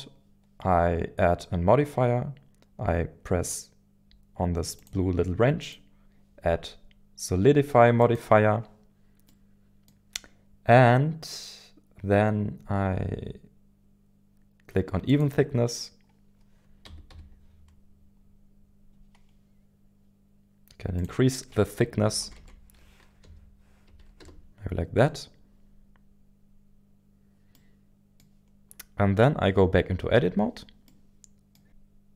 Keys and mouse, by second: 4.8 click, 8.3 click, 9.3-12.6 middle drag, 15.1 click, 16.8 KP_1, 17.1 KP_1, 17.1 KP_7, 21.0-24.9 drag, 22.2 Left, 22.3 Left, 27.5-28.2 middle drag, 30.1 Tab, 30.8 middle click.